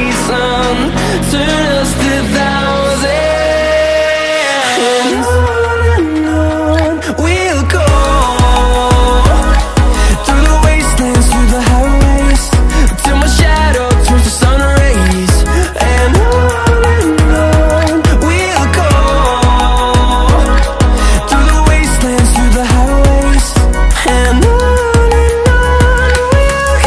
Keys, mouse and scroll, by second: 0.0-0.7 typing, 2.3 click, 2.9 KP_0, 3.2 KP_Decimal, 3.3 KP_0, 3.6 KP_2, 4.6 click, 6.7 middle click, 7.7 middle click, 8.4 middle click, 8.9 middle click, 9.3 middle click, 9.7 middle click, 10.3 middle click, 11.0-11.5 scroll down 2, 12.1-13.2 scroll up 3, 13.4 middle click, 13.5 scroll down 1, 13.5 middle click, 13.8 middle click, 14.3 middle click, 14.8 middle click, 15.2 middle click, 15.6 middle click, 16.1 middle click, 16.7 scroll up 1, 17.1 scroll down 1, 17.5 scroll up 1, 18.0 middle click, 18.5-19.1 scroll down 2, 19.4 middle click, 20.0 middle click, 20.5 middle click, 21.0 middle click, 21.3 middle click, 21.9 middle click, 22.1 scroll up 1, 22.3 middle click, 22.9 scroll down 1, 23.3 middle click, 24.0 scroll up 1, 24.5 scroll down 1, 25.0 middle click, 25.6-26.0 scroll up 2, 26.0 middle click, 26.4 middle click.